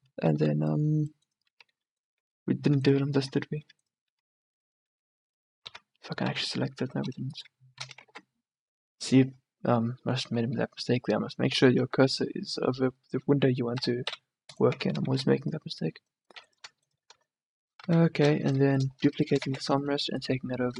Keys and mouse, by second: 0.1 Tab, 0.5 a, 2.4 Tab, 2.9 Tab, 3.3 Tab, 3.8 Tab, 4.2 Tab, 5.0 Tab, 5.9 Tab, 6.4 a, 6.9 s, 8.2 ctrl+z, 13.8 s, 14.8 Tab, 15.2 a, 15.4-16.8 middle drag, 16.8 click, 17.9 KP_1, 18.1 middle click, 18.3 click, 19.6 shift+d.